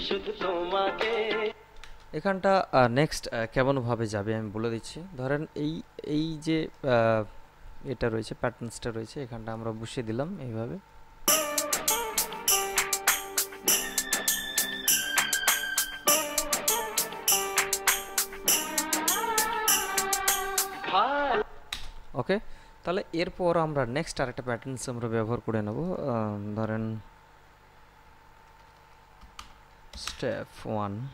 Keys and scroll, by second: 1.7 space, 11.5 space, 21.5 space, 28.2-29.9 typing.